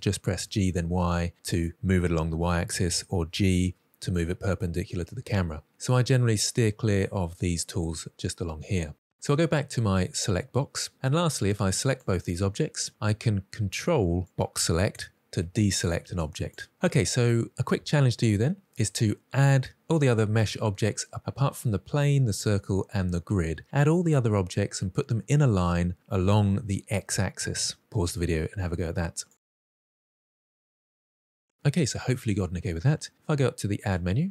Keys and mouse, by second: 0.1 g, 0.3 y, 3.0 g, 3.8 right click, 10.1 click, 11.4-11.8 drag, 14.0-14.9 ctrl+drag, 16.1-16.5 ctrl+drag, 20.1-31.5 drag, 33.9-34.3 drag.